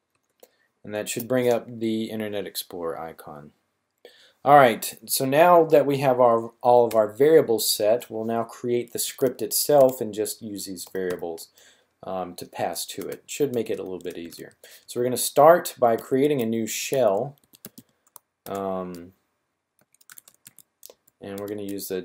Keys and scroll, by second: 8.6-9.7 typing, 10.8 typing, 13.4-14.2 typing, 15.9-18.1 typing, 19.8-21.3 typing.